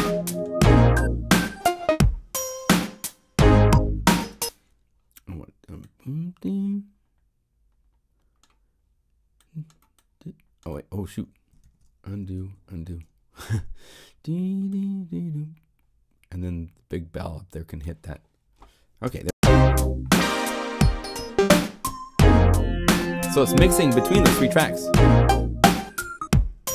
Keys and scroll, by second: 11.6 super+z, 19.0 0, 19.3 Home.